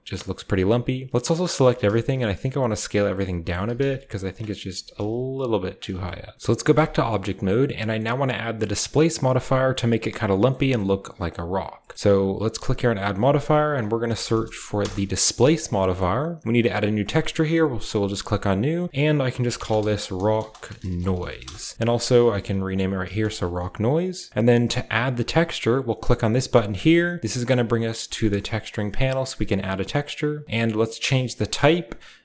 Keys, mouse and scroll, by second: 0.0-1.8 typing, 2.9 click, 3.4-4.9 typing, 4.2 click, 4.6 click, 4.6-5.7 scroll up 1, 5.7 click, 5.7-6.3 scroll up 1, 5.9 Tab, 6.3 ctrl+b, 6.3-8.2 scroll down 1, 6.7 Tab, 7.7-8.8 middle drag, 9.1-12.8 shift+middle drag, 9.1-10.3 shift+scroll up 1, 10.3-11.6 scroll up 1, 11.6-12.8 shift+scroll down 1, 12.8-14.1 drag, 14.0-15.3 typing, 15.6 scroll down 1, 15.8-18.4 shift+middle drag, 17.0 click, 18.7 click, 18.7 middle click, 18.8-21.9 typing, 18.9-19.4 scroll down 1, 22.0 ctrl+click, 22.3 ctrl+c, 23.0 ctrl+v, 23.2 drag, 26.7-28.6 drag, 29.2-30.4 scroll up 1, 31.4 click.